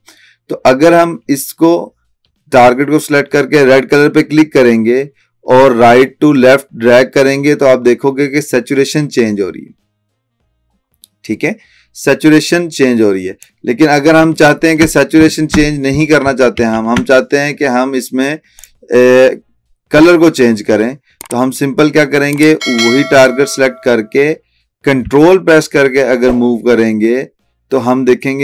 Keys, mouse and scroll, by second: 4.0-13.7 drag, 14.7 ctrl+z, 15.4 ctrl+z, 16.3 ctrl+alt+z, 18.6 click, 23.3 click, 25.6 typing, 25.7-28.4 ctrl+drag.